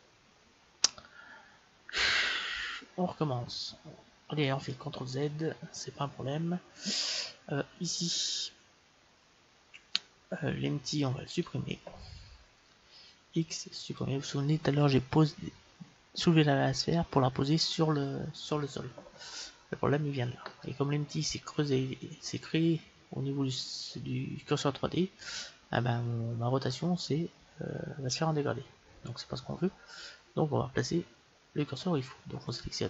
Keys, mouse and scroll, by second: 4.9 ctrl+z, 11.3-13.1 right drag, 13.3 x.